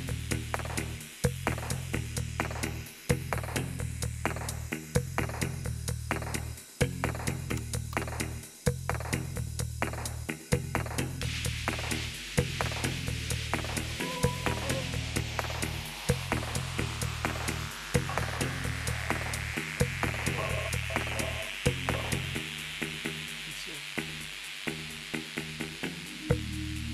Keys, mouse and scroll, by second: 0.0 click, 3.1 click, 4.8 click, 6.2 click, 7.4-7.9 typing, 9.4 click, 10.6 click, 12.1 click, 16.9 click, 18.2 click, 19.8 click, 21.0 click, 21.8 scroll down 2, 24.8 click, 25.9 click, 26.4 click.